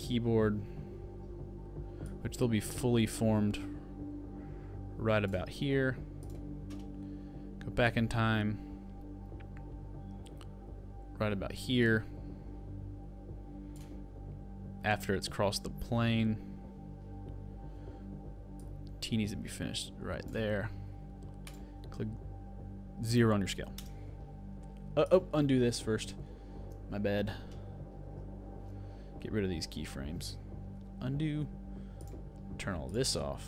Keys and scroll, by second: 26.3 super+z, 30.8 super+z, 31.9 super+z.